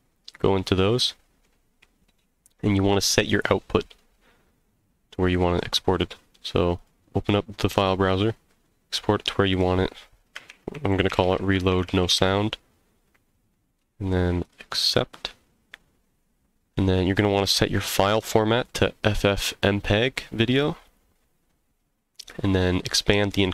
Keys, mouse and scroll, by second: 6.7 click, 17.1-20.9 drag, 22.9 click.